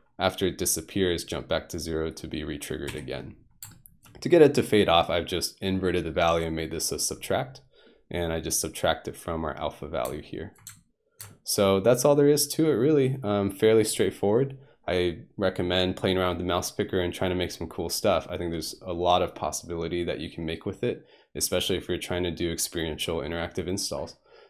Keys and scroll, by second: 2.9 F1.